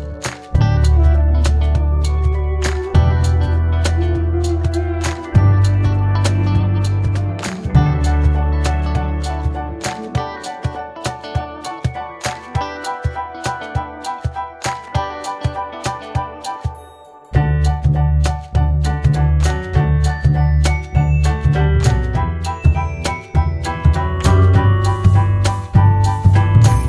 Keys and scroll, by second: 1.1-4.9 typing, 1.4 Return, 8.0-8.9 typing, 17.6 ctrl+c, 17.8 ctrl+v.